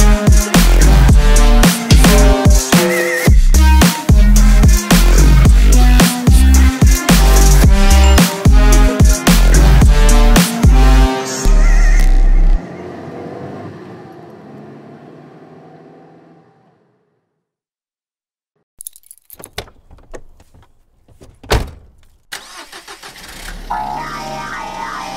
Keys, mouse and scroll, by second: 0.1 3, 0.3 click, 1.1 e, 3.4 Tab, 5.5 click, 5.8-6.3 drag, 6.8 scroll down 3, 7.0-7.6 scroll up 1, 7.6-9.9 middle drag, 9.9 click, 11.0-13.4 middle drag, 13.4-16.4 shift+drag, 17.0-22.1 middle drag, 22.1-25.1 drag.